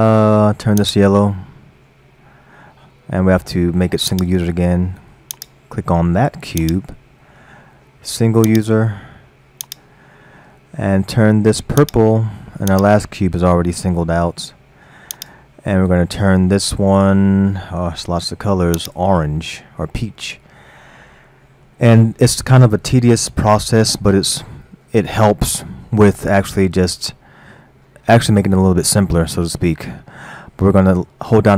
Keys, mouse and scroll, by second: 4.1 click, 5.3 click, 6.6 click, 8.5-8.9 drag, 9.7 click, 12.8 click, 15.1 click, 20.1-23.2 middle drag, 29.5 scroll down 1.